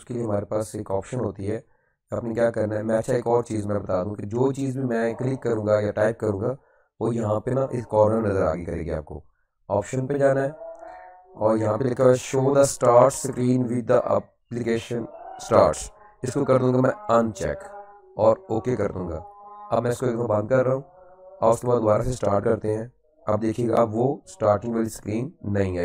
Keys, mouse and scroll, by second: 0.6 click, 0.6 typing, 1.9-2.5 typing, 7.3 click, 7.3 typing, 10.3 click, 10.4-11.5 typing, 16.9 click, 16.9 typing, 23.6 click, 23.6 typing, 25.1-25.8 typing.